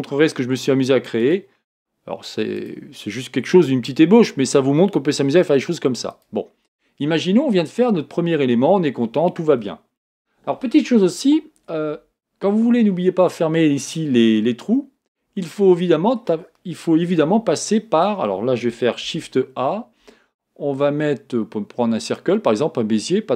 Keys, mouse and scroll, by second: 2.4 g, 2.5 click, 3.8 g, 11.9 Tab, 13.3-17.2 middle drag, 17.2 KP_1, 19.0 shift+a.